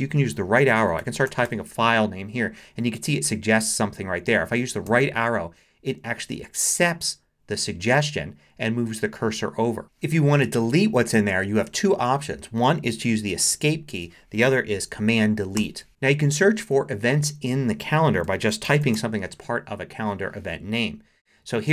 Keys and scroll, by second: 0.6-1.9 typing, 4.9 Right, 15.6 super+BackSpace, 18.2-19.4 typing.